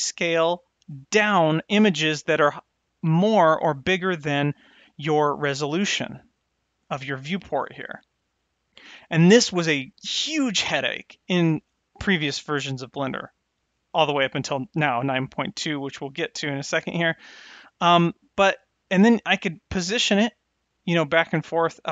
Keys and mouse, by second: 6.6 click, 18.8-20.4 drag, 20.8-21.9 drag.